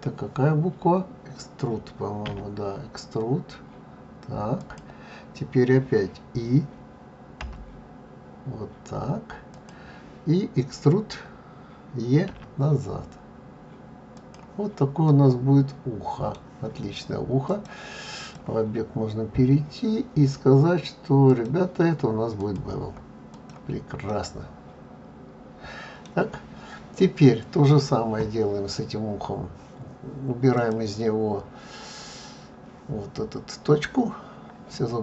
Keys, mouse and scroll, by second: 15.2 middle click, 23.4 click, 24.2 middle click.